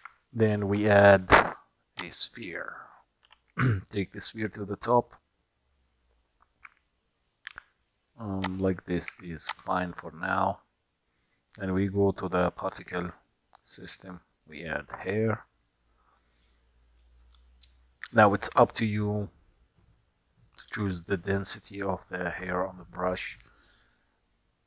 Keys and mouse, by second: 0.0 shift+a, 3.3 g, 9.1 q, 14.2 click, 15.5 click, 19.2 click, 21.1-22.6 shift+middle drag, 24.5-24.6 drag.